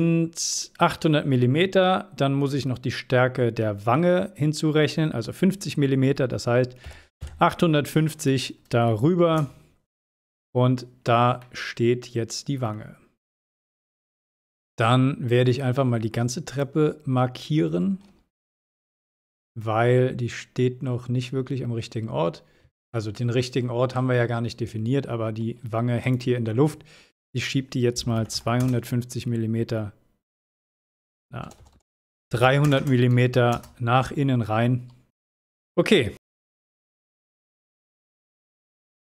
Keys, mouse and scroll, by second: 10.6 scroll down 1, 11.4-12.9 middle drag, 12.9-13.4 scroll down 1, 13.9-14.5 shift+middle click, 14.7 space, 14.9-16.8 drag, 17.5 scroll up 1, 18.4 m, 19.0-19.3 scroll up 1, 22.9-23.8 shift+middle drag, 26.0 click, 34.9 scroll down 1, 35.4 space, 35.8 click, 37.2-38.4 middle drag, 38.6 scroll down 1.